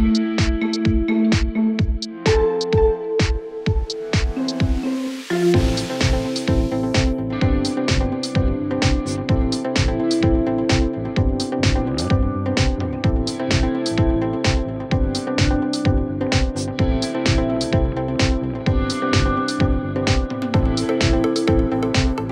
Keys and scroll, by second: 6.2 space, 7.4 typing, 15.8 Return, 17.6-18.3 typing, 19.3 Return, 20.1 Down, 20.9 Up, 21.6-22.3 typing.